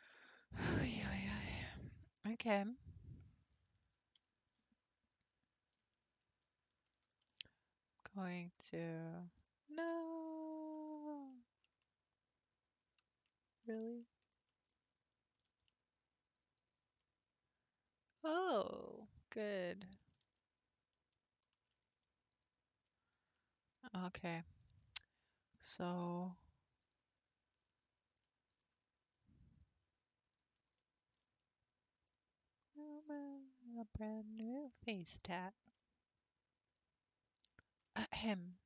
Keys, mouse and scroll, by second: 0.3-0.7 scroll down 5, 0.9 middle click, 1.8-2.3 scroll up 3, 2.3-3.9 middle drag, 3.9 Tab, 6.1 Tab, 6.9-7.9 shift+middle drag, 7.9 alt+click, 8.6-9.7 middle drag, 9.7 scroll up 2, 9.9-13.5 middle drag, 13.5-14.0 scroll down 1, 14.0-15.5 shift+middle drag, 15.5 ctrl+r, 17.0-19.4 middle drag, 19.4 scroll up 2, 20.2 ctrl+z, 21.5-22.3 middle drag, 22.3 alt+click, 23.3-25.5 middle drag, 25.5-27.4 drag, 27.4 scroll up 2, 28.2-29.5 middle drag, 29.5 click, 30.3 ctrl+click, 30.8-32.1 middle drag, 32.1 ctrl+click, 33.1 ctrl+click, 33.9 ctrl+click, 34.7 ctrl+click, 35.4-36.7 middle drag, 36.7 ctrl+click, 37.8-38.6 middle drag.